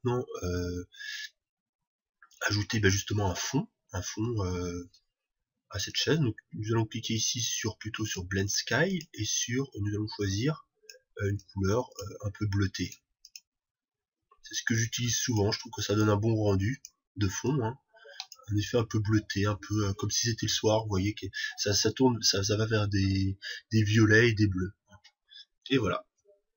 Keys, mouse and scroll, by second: 5.4-11.3 middle drag, 6.4-11.3 drag, 13.3-15.6 drag.